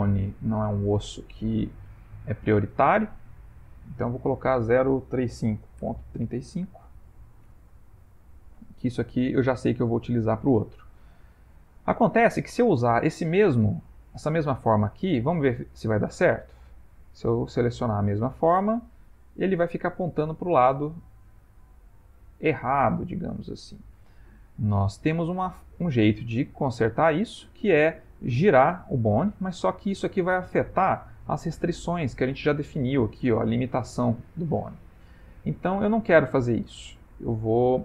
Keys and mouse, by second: 0.7 middle click, 4.2 click, 8.2 ctrl+middle click, 13.6 click, 15.0 click, 16.9 click, 25.7 shift+middle click, 26.5 ctrl+middle click, 31.0 click, 35.6 middle click, 36.3 ctrl+middle click, 37.1 middle click, 37.3 middle click, 37.6 middle click.